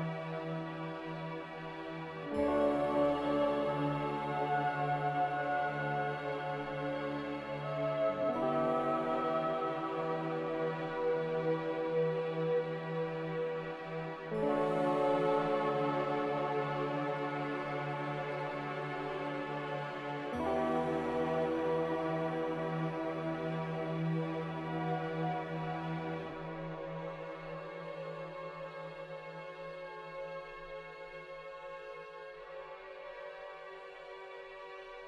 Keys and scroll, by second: 13.4 ctrl+g, 18.8 n, 21.9 m.